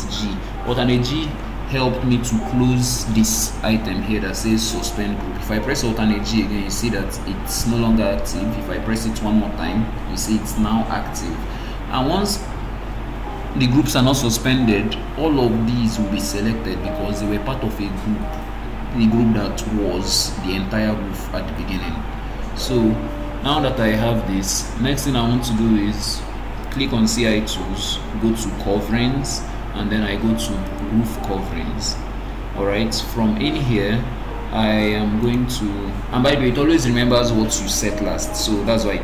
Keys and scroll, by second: 6.2 alt+g, 9.4 alt+g.